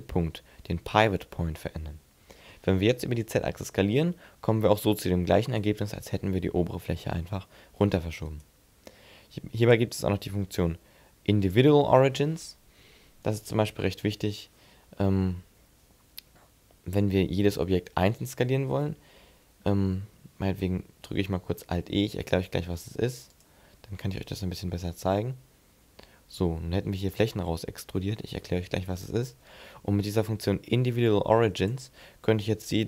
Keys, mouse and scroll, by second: 2.0 s, 8.2 right click, 9.4 click, 21.7 alt+e, 27.0 click, 31.4 click, 32.4 s.